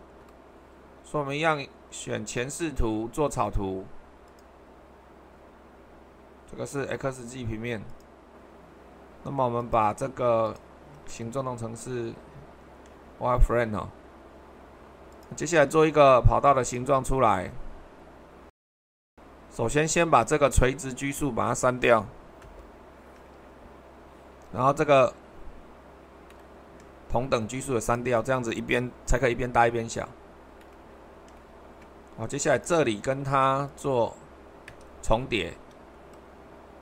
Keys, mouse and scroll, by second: 2.3-3.5 drag, 4.3-5.4 drag, 5.6-6.6 middle drag, 7.2 click, 9.6-13.9 drag, 15.1-16.2 drag, 16.6-17.7 drag, 22.4 Delete, 29.1 Delete.